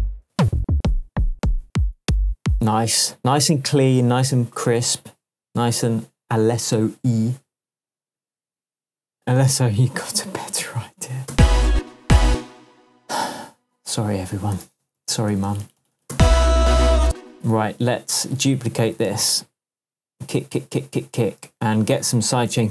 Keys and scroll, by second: 0.2 Down, 2.3 Up, 11.3 space, 14.6 super+d, 15.9 super+d, 16.1 super+space, 17.0 space, 19.0 super+d, 21.4 super+d.